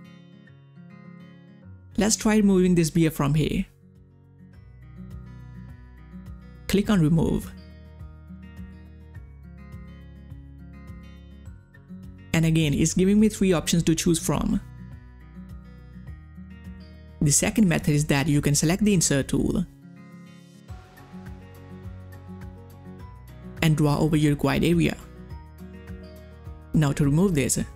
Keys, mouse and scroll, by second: 0.1 click, 0.1 click, 1.8 ctrl+scroll up 1, 2.9 click, 2.9 space, 3.3 space, 3.7-6.5 drag, 9.1 click, 9.2 ctrl+scroll down 1, 9.6 space, 9.7 click, 10.0 space, 12.7 space, 12.7 click, 16.7 click, 21.0 ctrl+scroll up 1, 21.5 ctrl+scroll down 1, 21.7 space, 21.7 click, 21.8 space, 22.0 ctrl+scroll up 1, 22.2 space, 22.5 ctrl+scroll down 1, 22.6 space, 22.7-26.4 drag.